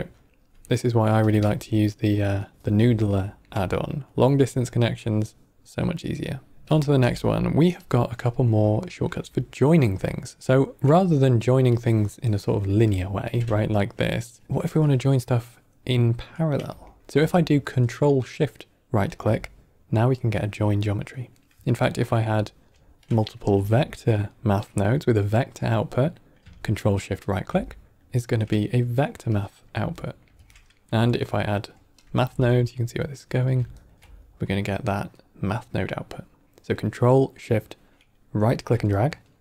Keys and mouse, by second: 1.3 ctrl+z, 1.7 ctrl+right click, 2.3 ctrl+middle click, 3.0 ctrl+middle click, 3.6 middle click, 6.6 ctrl+z, 6.6 drag, 7.7 g, 8.1 middle click, 8.7 ctrl+middle click, 9.4 middle click, 10.0 ctrl+middle click, 10.4 middle click, 11.6 click, 12.6 shift+d, 13.5 alt+right click, 14.4 alt+right click, 14.5-15.6 drag, 16.0-16.6 drag, 16.8 ctrl+middle click, 18.4-18.9 ctrl+shift+right drag, 19.8 click, 21.3 middle click, 21.8 middle click, 22.4 ctrl+right click, 22.9 click, 23.4 shift+d, 24.5 middle click, 26.9 ctrl+shift+right drag, 28.7 click, 29.2 click, 29.9 ctrl+middle click, 30.5 middle click, 30.9 q, 32.2 shift+d, 33.7 ctrl+shift+right drag, 34.8-35.4 drag, 38.9 ctrl+shift+right click.